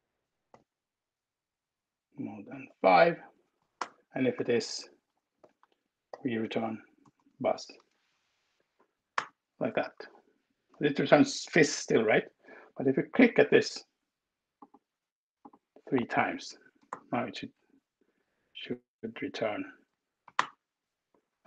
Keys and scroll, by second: 0.0-0.2 typing, 2.9 ctrl+alt+Down, 3.4 space, 4.0 shift+2, 5.2-6.8 typing, 8.8 alt+Return, 16.7 alt+Return, 19.1 Escape, 20.3 alt+Return.